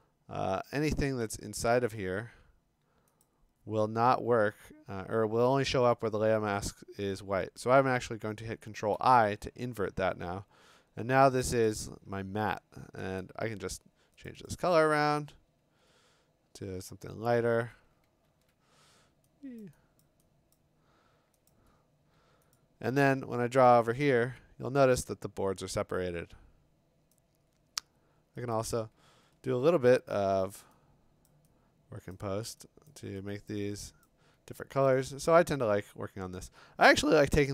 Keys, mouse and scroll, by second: 1.2 alt+BackSpace, 3.2 click, 7.5 click, 8.9 ctrl+i, 11.7 click, 14.3 click, 14.5 click, 16.9 Escape, 18.3 ctrl+u, 19.6 click, 20.0 click, 20.5 click, 21.5 click, 22.5 click, 23.2 b, 27.5 click, 28.5 click, 29.6 ctrl+u, 31.3 click, 32.1 click, 32.9 click, 33.5 click, 34.1 click, 34.9 click, 35.5 scroll up 5, 36.1 scroll down 3.